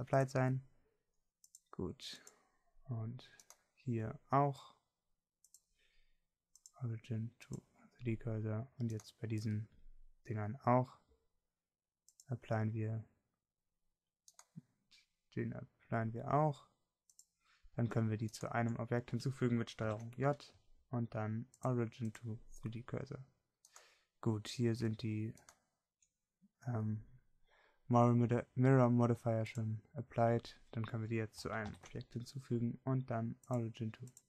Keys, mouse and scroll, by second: 12.0-13.4 middle drag, 15.1 middle click, 21.1 ctrl+j, 32.9 ctrl+j.